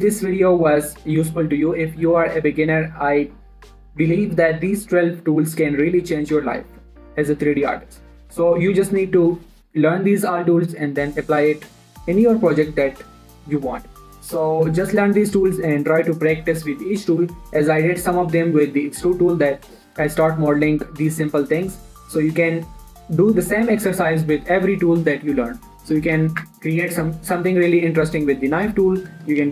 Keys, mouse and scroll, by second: 15.2 shift+Num_Lock, 15.4 shift+middle click, 15.6-17.2 scroll up 1, 26.8 Tab, 27.1-27.6 scroll up 1, 27.6 click.